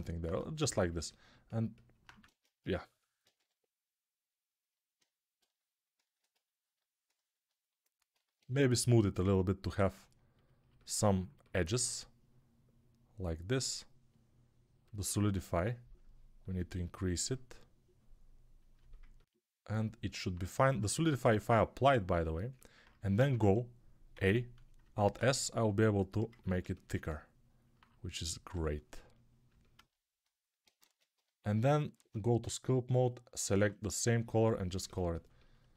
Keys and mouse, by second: 0.0-35.7 typing, 0.5-4.8 ctrl+alt+middle drag, 2.1 ctrl+Tab, 4.8-8.0 alt+right drag, 8.0-26.2 ctrl+alt+drag, 23.1 Tab, 24.8 alt+s, 26.2-33.2 ctrl+alt+shift+middle drag, 30.7 ctrl+Tab, 32.0 ctrl+Tab, 33.2-35.7 ctrl+alt+drag.